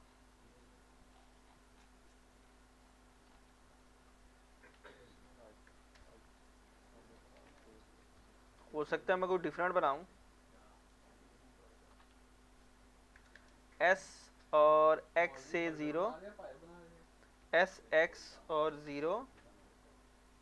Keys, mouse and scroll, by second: 1.2 scroll down 1, 2.5 scroll up 1, 3.3 scroll down 1, 3.7 scroll up 1, 4.5 s, 4.8 z, 6.9 shift+middle click, 8.0 ctrl+r, 9.1-9.6 scroll up 1, 9.6 click, 9.9 right click, 10.8 alt+click, 11.7-12.7 typing, 15.1-16.5 drag, 17.2-18.3 typing.